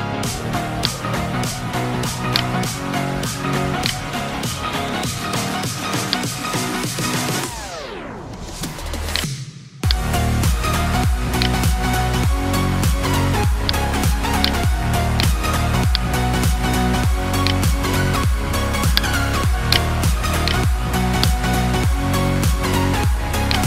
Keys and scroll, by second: 11.9 ctrl+t.